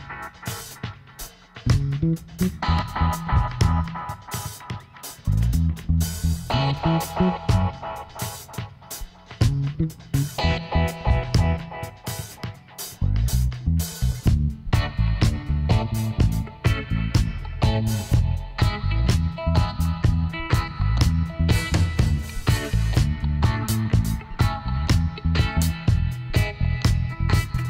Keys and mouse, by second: 0.8-2.6 drag, 2.6-4.1 middle drag, 4.7-6.4 right drag, 6.4 g, 9.7 right click, 9.9 g, 13.3 click, 13.7-15.4 middle drag, 17.7-20.6 middle drag, 19.3 ctrl+r, 21.9 f, 23.1 middle click, 23.7 middle click, 25.7 f, 25.9 right click, 27.5 click.